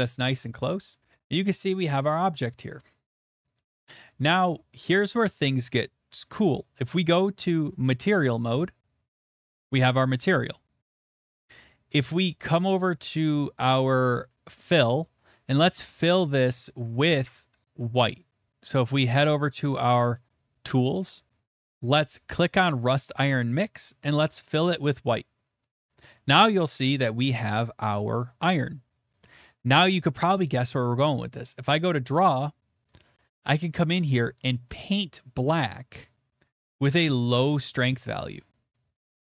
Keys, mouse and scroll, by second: 0.0 middle click, 0.4 `, 0.7 middle click, 1.1 shift+middle click, 1.6 shift+middle click, 2.1 middle click, 2.3 shift+middle click, 3.6 middle click, 3.8 middle click, 4.8 shift+middle click, 7.8 click, 10.3 middle click, 11.1 middle click, 13.3 click, 16.3 click, 17.0 click, 20.1 click, 22.6 click, 22.6 click, 25.0 click, 26.5 middle click, 27.2 middle click, 31.4 click, 35.4 click, 38.2 click, 39.0 shift+middle click.